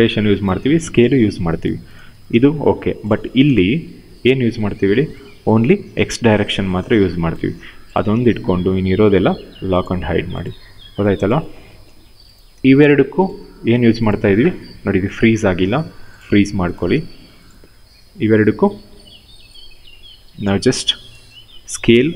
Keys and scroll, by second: 4.2 e, 5.5 ctrl+z, 16.6 w.